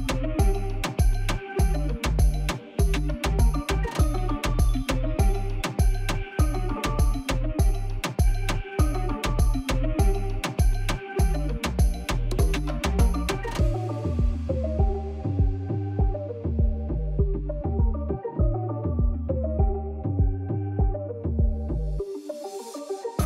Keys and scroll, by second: 0.2 g, 0.4 shift+z, 1.1 g, 1.1 z, 2.6 alt+a, 14.7 shift+d, 14.9 shift+z, 15.5 s, 15.9 z, 17.2 g, 17.4 shift+z, 18.2 shift+d, 18.5 shift+z, 19.6 alt+a, 20.6-23.2 typing.